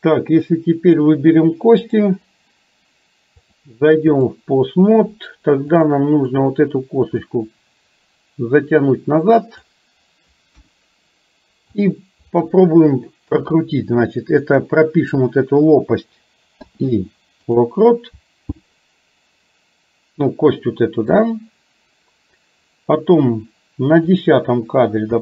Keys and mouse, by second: 2.0 click, 3.6 click, 5.9 click, 7.4-9.8 drag, 10.6 KP_1, 11.9 click, 16.6 i, 21.2 click, 24.1 click.